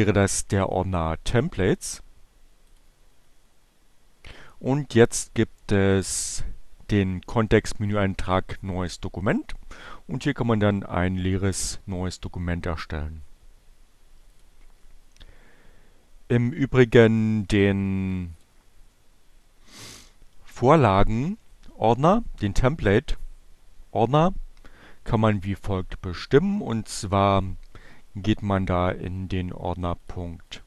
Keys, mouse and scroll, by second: 2.4 click, 4.9 right click, 14.4 click, 16.7 click, 18.3 click, 29.5 click, 30.5 click.